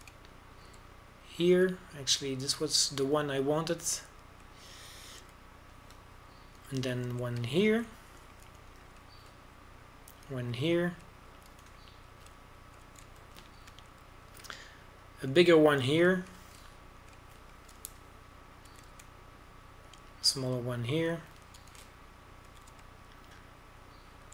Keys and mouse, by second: 0.4 right click, 1.1 middle click, 1.2 middle click, 7.1 w, 9.0 z, 10.5 w, 13.4 w, 14.8 a, 15.0 z, 17.6-20.6 drag, 18.4 z, 19.7 w, 20.6 a, 20.9 z, 21.1 click, 22.3 z, 23.5 w.